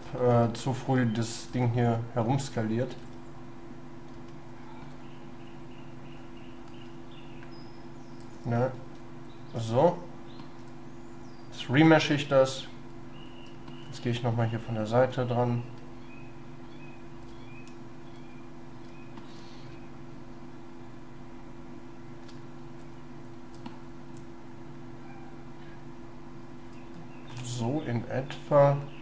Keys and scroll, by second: 6.7 ctrl+y, 8.7 ctrl+shift+y, 14.3 shift+space, 19.7 shift+space.